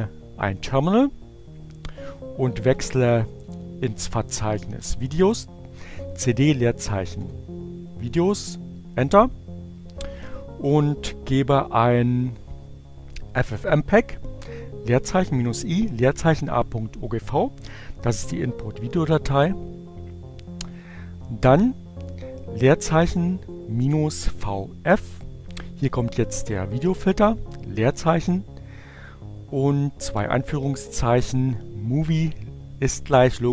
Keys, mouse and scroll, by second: 1.8-4.9 typing, 5.6 Return, 9.5-10.1 drag, 10.4 Up, 20.6 click, 21.8 click.